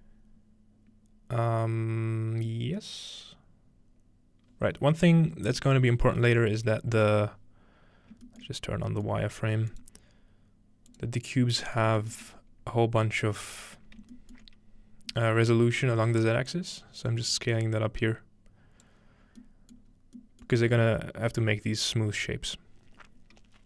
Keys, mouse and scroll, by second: 6.1 middle click, 6.4 alt+middle click, 6.6-8.2 scroll up 1, 7.2-8.3 middle drag, 8.6-10.5 shift+middle drag, 9.7-11.6 drag, 11.3-12.3 scroll down 2, 11.9 shift+middle click, 12.1-13.8 shift+middle drag, 12.3-13.8 scroll up 1, 14.5 shift+middle click, 14.6-15.3 scroll down 2, 14.7-15.9 shift+middle drag, 15.3-15.9 scroll down 1, 16.5-18.9 drag, 19.3-19.9 scroll down 1, 19.5-20.1 middle drag, 19.9 scroll up 1, 20.1 scroll, 21.2-21.9 scroll up 2, 22.7-23.5 scroll down 2, 23.5-23.6 scroll down 1.